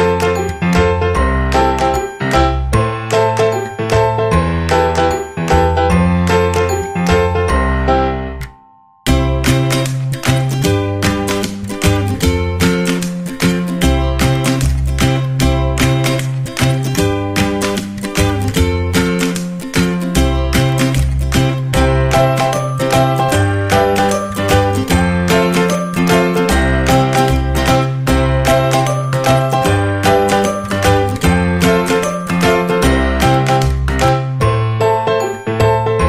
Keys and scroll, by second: 4.6 ctrl+=, 8.4 ctrl+0, 13.1 ctrl+=.